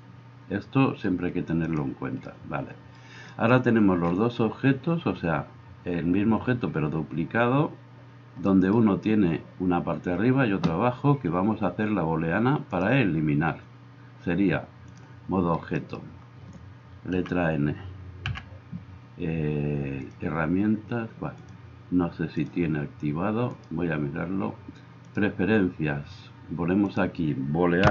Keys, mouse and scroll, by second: 0.0-20.1 drag, 17.1 n, 18.2 n, 20.1-21.4 middle drag, 21.4-22.6 drag, 22.6 middle click, 23.5-27.9 drag.